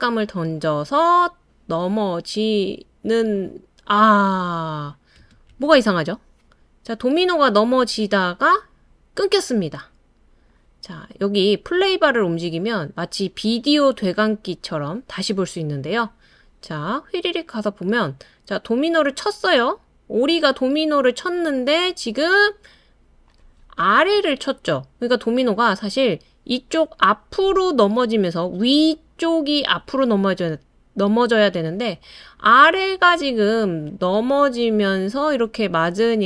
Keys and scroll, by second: 5.2 typing.